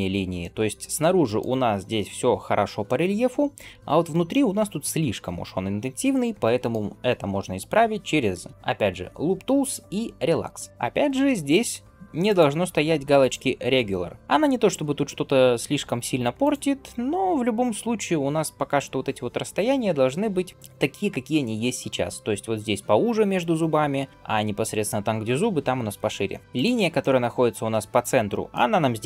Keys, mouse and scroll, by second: 0.3 middle click, 2.7 middle click, 3.8-4.2 scroll up 2, 4.1-6.6 middle drag, 8.4-10.7 right drag, 10.7 alt+KP_2, 12.1 click, 13.0 click, 16.3 click, 26.4 alt+click, 26.4 scroll up 1, 26.8-28.4 middle drag.